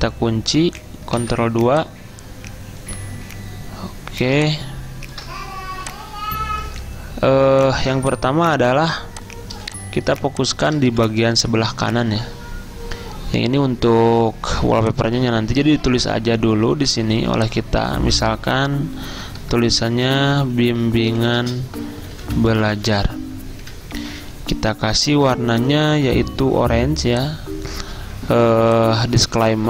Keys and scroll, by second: 1.3 ctrl+2, 9.6 z, 10.9 v, 19.8-23.4 typing, 23.7 Escape.